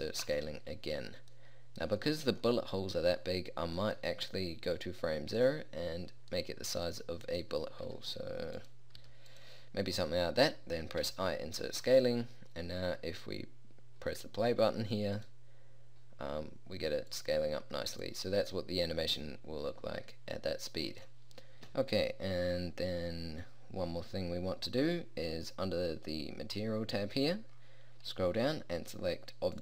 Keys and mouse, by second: 8.0 s, 9.1 s, 11.1 i.